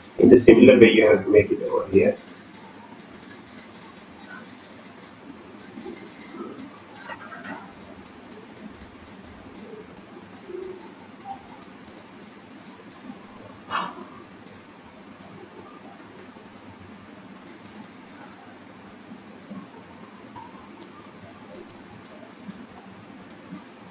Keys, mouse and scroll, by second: 0.5 shift+middle click, 0.8-1.6 scroll up 2, 4.0-4.9 scroll up 2, 12.9-13.4 scroll down 10, 13.6-14.8 scroll up 7, 14.8 scroll up 3, 15.7 click, 15.7-16.2 scroll up 2, 18.2 click, 20.3 click, 22.5 click.